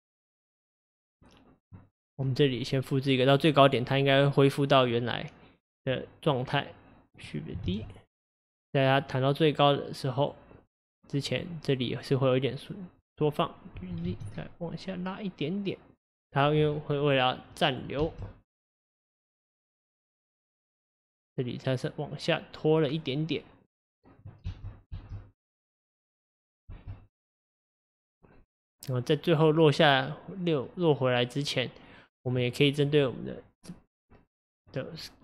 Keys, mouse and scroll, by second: 2.8-6.4 drag, 6.6 click, 7.7 shift+d, 9.0 click, 12.0-12.5 scroll up 1, 13.8 g, 16.7-17.5 scroll down 3, 17.5 click, 18.0 space, 19.9 click, 24.5 space, 24.9 space, 26.8 space, 27.3 click, 32.9 click, 34.6 click.